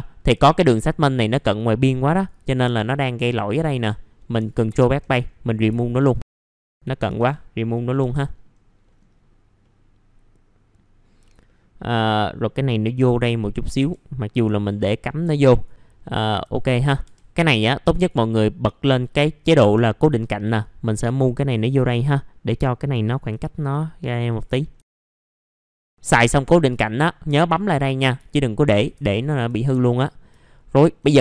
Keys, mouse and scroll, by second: 0.2-0.8 scroll up 2, 1.2-2.6 drag, 2.6 F3, 4.7 BackSpace, 5.2-5.7 scroll down 1, 5.7 alt+middle click, 6.2 scroll up 1, 6.3 F3, 6.5 click, 7.2 BackSpace, 7.7-8.0 scroll down 1, 8.0 F3, 8.2 middle click, 8.3-8.8 scroll down 1, 8.8 middle click, 8.9 scroll down 1, 9.6 middle click, 11.1-11.4 scroll up 1, 11.4 middle click, 13.5 scroll up 1, 13.8 F3, 14.7 click, 16.0-16.4 scroll up 1, 16.5 alt+middle click, 17.0 F3, 17.9 click, 23.0 scroll down 1, 23.4 alt+middle click, 23.8-24.3 scroll up 1, 24.3 click, 24.6 scroll up 1, 24.8 alt+middle click, 25.1 click, 25.6 scroll down 1, 25.8 scroll up 1, 27.5 click, 28.2 alt+middle click, 29.2 scroll down 1, 29.5 alt+middle click, 30.4 alt+middle click.